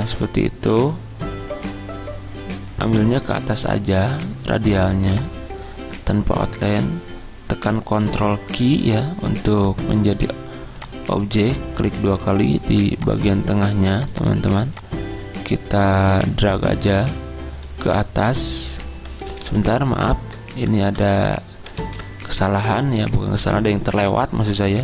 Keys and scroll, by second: 8.3 ctrl+q, 19.3 ctrl+z, 19.5 ctrl+z, 22.0 ctrl+z.